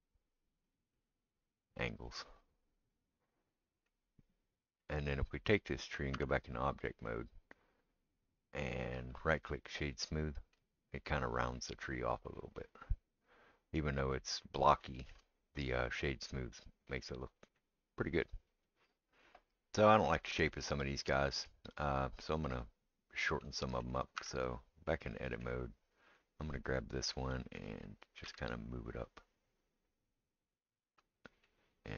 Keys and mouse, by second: 0.8-9.1 middle drag, 6.1 Tab, 9.3-14.8 right drag, 14.8-19.6 shift+middle drag, 19.6-31.9 right drag, 24.2 Tab, 27.6-31.9 middle drag, 28.3 g.